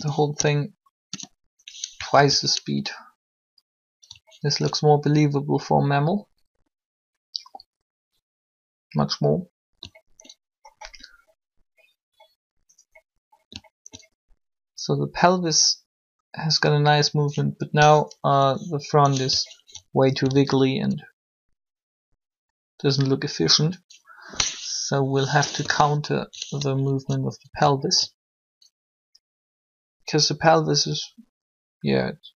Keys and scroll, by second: 0.0-2.1 typing, 2.1 alt+a, 18.3 7, 20.2 alt+shift+a, 25.6 3.